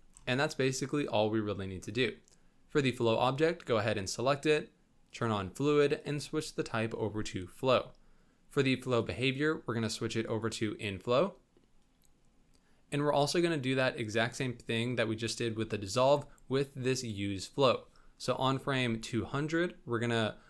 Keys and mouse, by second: 2.9 click, 5.1 click, 5.9-7.5 drag, 9.1-10.4 drag, 18.5 Down, 18.8 Left.